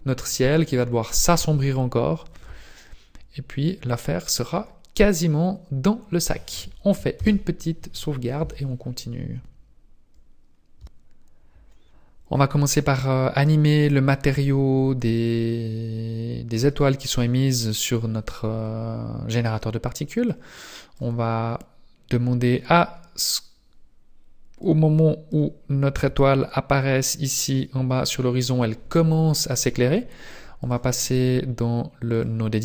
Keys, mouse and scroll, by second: 5.0-7.1 scroll down 2, 7.1 ctrl+s, 10.4 scroll down 1.